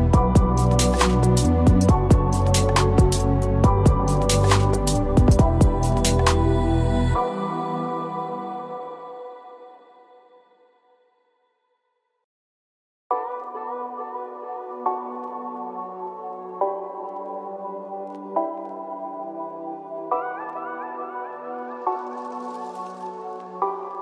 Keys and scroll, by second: 12.1 ctrl+Return, 16.0 ctrl+-, 17.6 ctrl+=.